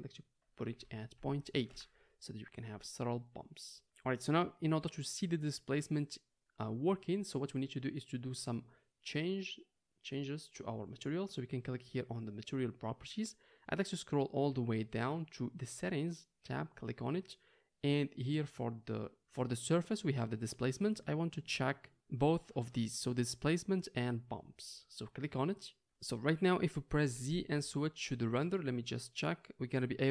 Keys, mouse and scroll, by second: 16.5-30.1 drag, 27.2 z.